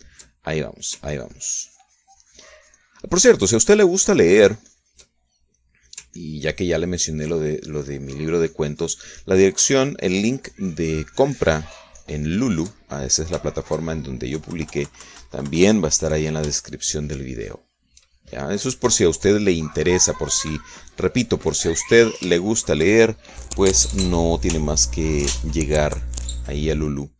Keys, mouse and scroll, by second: 2.6-4.6 ctrl+drag, 5.0-6.7 ctrl+drag, 6.8 ctrl+middle click, 7.7-14.6 ctrl+drag, 14.6 ctrl+shift+middle click, 15.9 KP_Subtract, 18.2 shift+click, 19.0 shift+middle click, 19.1 shift+click, 19.6 shift+middle click, 20.0-22.6 drag, 22.9 click, 23.6 shift+middle click, 23.9 shift+click, 24.5 shift+middle click.